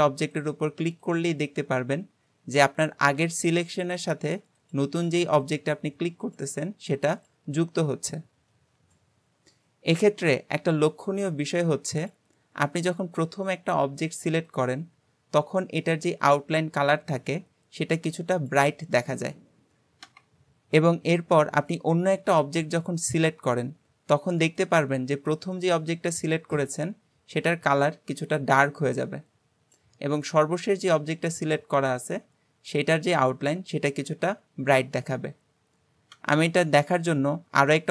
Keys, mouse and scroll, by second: 0.3 shift+click, 1.1 shift+click, 4.6 shift+click, 5.5 shift+click, 6.3 shift+click, 7.2 shift+click, 12.1 click, 12.5-16.6 scroll up 1, 22.7 shift+click, 23.7-27.3 scroll up 1, 27.3-36.4 scroll up 1, 36.9-37.9 scroll down 2.